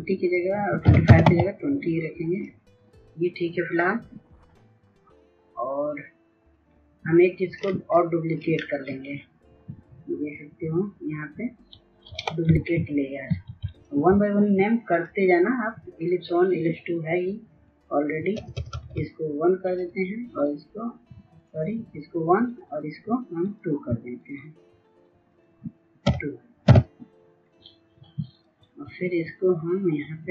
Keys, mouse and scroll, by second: 0.2 KP_2, 0.5 KP_0, 0.7 Tab, 1.8 click, 8.1 right click, 12.0 ctrl+s, 12.8 ctrl+s, 13.3 click, 17.9 BackSpace, 19.3 click, 22.3 right click, 23.1 click, 25.7 BackSpace, 26.3 KP_2, 27.1-30.3 drag.